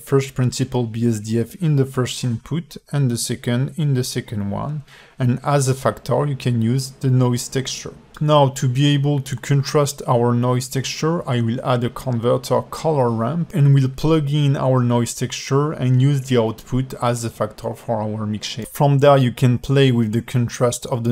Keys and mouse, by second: 0.3-2.0 drag, 4.0-5.8 drag, 6.3 ctrl+shift+click, 8.6 alt+shift+middle click, 9.2 click, 9.5 g, 11.1 shift+a, 16.9 click, 17.5 click, 19.7 click, 20.5 click.